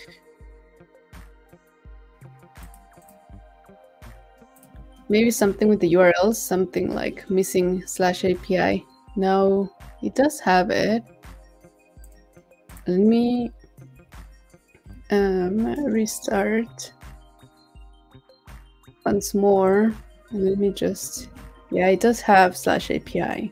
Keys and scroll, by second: 14.8 shift+super+p.